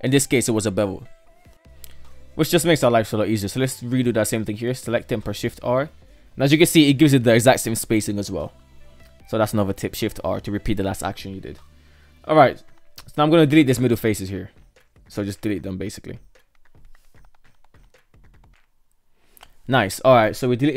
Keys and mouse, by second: 0.3-0.6 shift+middle drag, 1.3 shift+middle drag, 2.5 alt+right drag, 2.9-3.3 shift+middle drag, 4.3 shift+r, 5.6 shift+middle click, 9.0-11.0 shift+middle drag, 11.6 KP_3, 13.5 Delete, 14.8 shift+middle click, 15.9 alt+right click, 16.2 alt+right click, 16.8 shift+right drag, 17.0 Delete, 17.4 right click, 17.6 shift+right drag, 17.9 Delete, 18.9-20.7 shift+middle drag.